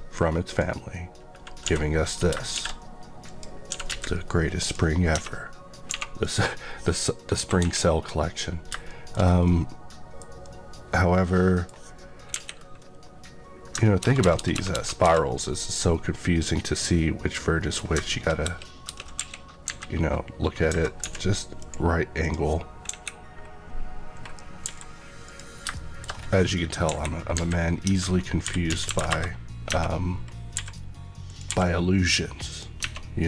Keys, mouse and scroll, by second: 1.6 s, 2.0 right click, 2.5 s, 3.2 click, 3.6 s, 3.8 z, 4.5 click, 5.0 click, 5.1 Tab, 5.8 1, 6.1 click, 6.5 scroll down 1, 7.3 KP_2, 8.8 middle click, 9.1 scroll up 1, 9.4 middle click, 12.2 KP_1, 13.7 ctrl+KP_1, 13.9 ctrl+KP_Add, 14.7 ctrl+KP_Add, 15.3 KP_Add, 15.7 middle click, 18.4 ctrl+KP_Add, 19.6 KP_3, 20.9 x, 21.5 click, 22.1 click, 24.6 e, 25.2 click, 25.7 middle click, 26.0-26.8 scroll down 1, 26.8 KP_1, 27.2 KP_3, 27.8 Tab, 28.4 r, 28.6 z, 28.8 KP_9, 28.9 KP_0, 29.0 KP_Enter, 29.6 Tab, 30.0-30.5 scroll up 1, 30.5 e, 31.2 click, 31.4 e, 32.4 click, 32.7 Tab.